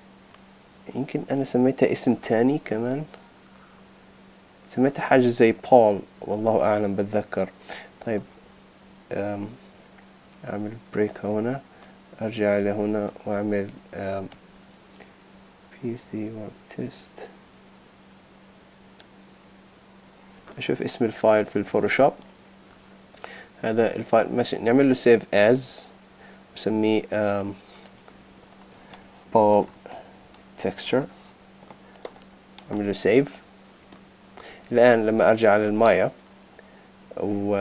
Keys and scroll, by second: 8.0 super+z, 20.5 super+Tab, 24.8 shift+super+s, 28.4 shift+p, 29.7 shift+t, 32.0 Return, 34.6 super+Tab.